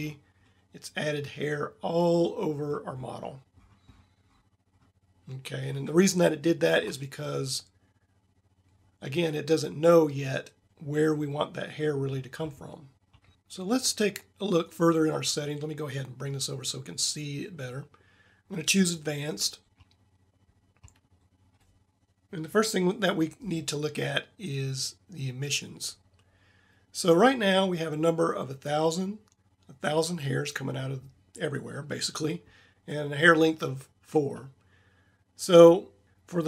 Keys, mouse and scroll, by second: 6.0-6.7 middle drag, 6.8 middle drag, 8.1-12.2 middle drag, 14.6-16.2 drag.